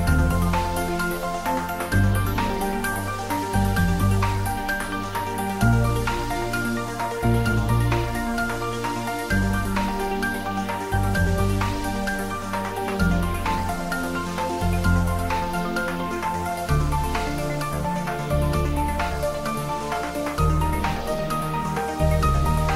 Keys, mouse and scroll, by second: 0.7 shift+middle click, 1.6 ctrl+s, 2.6 click, 3.8-4.7 typing, 4.8 click, 5.8 ctrl+middle click, 6.7-8.2 typing, 7.0 click, 8.3 click, 11.8 click, 17.5 click, 19.1 click, 20.6 ctrl+middle click, 21.2 middle click, 22.2 click.